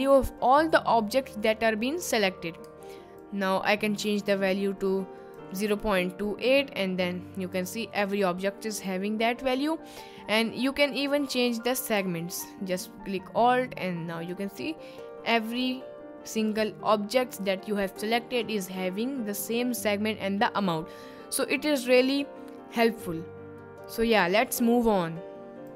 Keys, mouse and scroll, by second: 3.3-5.4 alt+drag, 7.4 click, 8.1 middle drag, 8.8 click, 11.1 click, 12.8-14.4 alt+drag, 15.5 click, 17.3 click, 19.3 click.